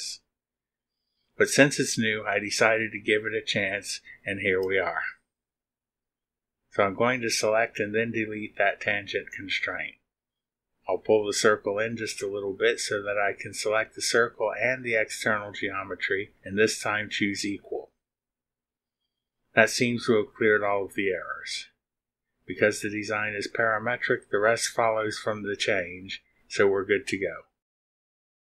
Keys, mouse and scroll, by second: 8.0 click, 10.2 Delete, 12.2-13.8 drag, 15.0 click, 15.9 click, 18.0 click, 23.2 click, 26.0 scroll down 1.